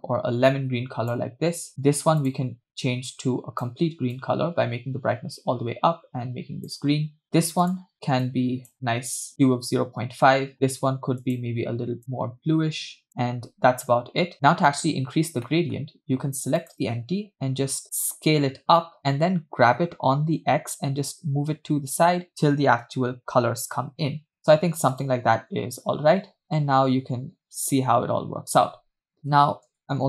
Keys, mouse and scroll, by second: 1.7 click, 2.2 click, 7.7 click, 10.5 click, 11.3 click, 15.5 middle click, 16.6 click, 18.0 s, 19.9 g, 25.4 space, 29.2 space, 29.4 space, 29.8 space.